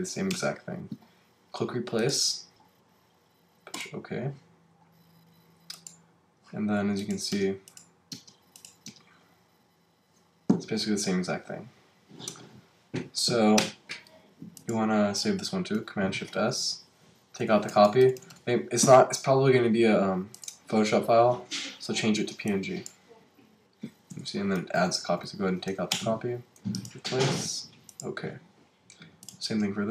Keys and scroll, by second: 0.3 Return, 15.7 shift+super+s, 17.4 Right, 24.1 Right, 25.9 Return, 29.8 shift+super+s.